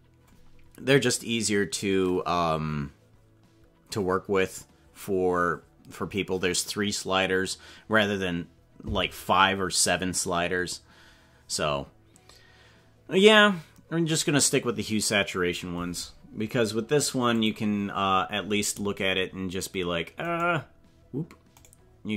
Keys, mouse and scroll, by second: 17.5 click, 18.4-19.1 scroll up 8, 20.3 right click, 21.6 right click.